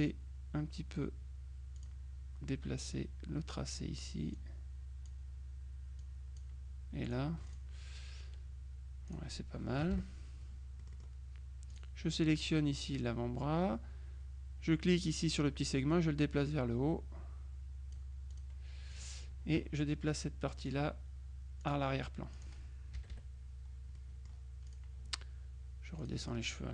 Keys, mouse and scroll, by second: 0.0 click, 1.9 click, 3.0 click, 4.5 click, 6.1 click, 7.1 click, 9.1 click, 9.9 KP_Subtract, 10.9 middle click, 11.8 click, 12.3-13.3 middle drag, 15.7-19.5 drag, 20.7 click, 21.7 click, 22.4 click, 23.0 KP_Subtract, 24.0-25.3 middle drag, 26.1 click.